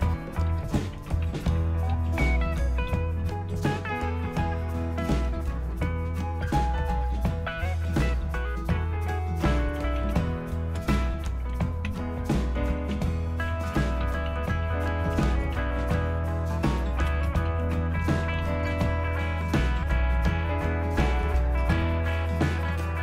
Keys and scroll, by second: 0.2-4.0 typing, 4.3 Return, 9.2-16.0 typing, 17.2-22.1 typing.